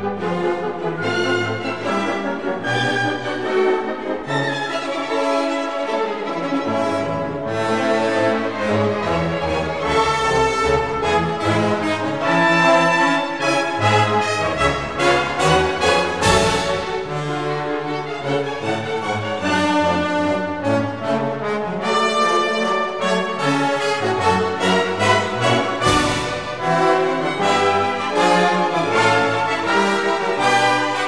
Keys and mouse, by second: 3.0 click, 6.7 Tab, 8.3 click, 8.6 click, 9.0 Tab, 11.0 ctrl+r, 12.4 click, 12.9 g, 13.0 z, 13.8 click, 15.4-17.1 drag, 18.3 click, 19.2 shift+click, 19.8 shift+click, 20.1 shift+click, 20.7 shift+click, 21.1 shift+click, 22.1 Delete, 24.6 2, 25.4 alt+click, 27.2 e, 28.6 x, 29.5 click.